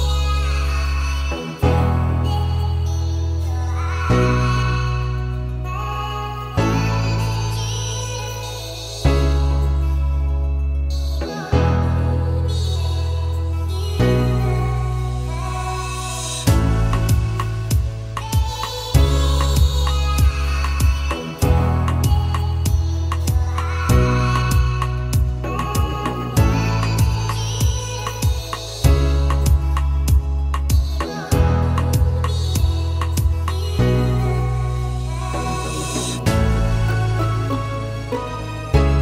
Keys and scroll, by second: 4.2 Escape, 7.5 Escape, 14.8 Escape, 21.0 Escape, 22.7 Escape, 26.9 Escape, 34.6 Escape.